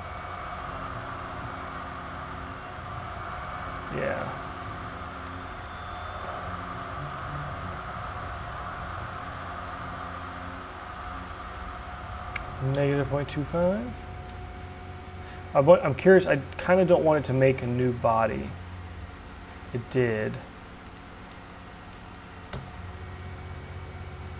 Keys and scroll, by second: 5.7 e, 12.8-13.7 typing, 19.2 ctrl+z, 22.4 e.